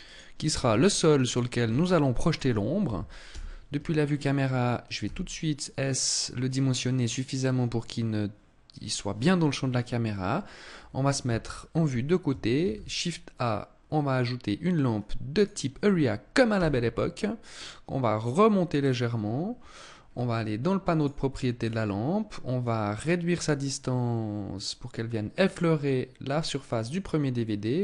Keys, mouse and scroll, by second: 0.0 s, 0.7 click, 0.9 s, 1.7 click, 2.6 KP_0, 4.3 s, 6.1 click, 10.5 KP_3, 11.9 shift+a, 16.0 g, 18.2 click, 18.8-19.4 scroll down 3, 19.4 scroll up 3, 20.3 click, 20.9 scroll down 2, 21.9 click, 26.7 click.